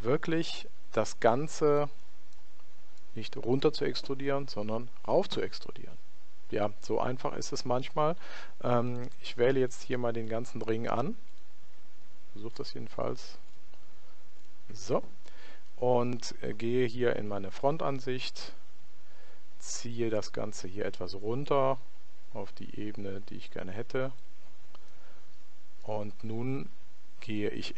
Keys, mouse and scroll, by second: 0.0 click, 2.4-4.2 middle drag, 8.9 click, 9.7-16.1 right drag, 17.4 KP_1, 20.1 click, 24.9-26.7 middle drag.